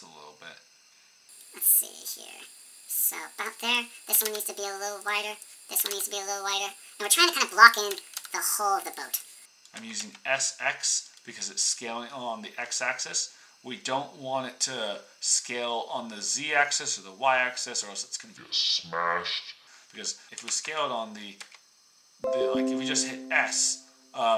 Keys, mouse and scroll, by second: 3.4 click, 4.1 s, 5.0 click, 5.7 s, 7.0 click, 7.8 s, 9.7 s, 11.1-12.7 middle drag, 20.2 s, 20.4 ctrl+z, 20.4 ctrl+click, 21.3 s.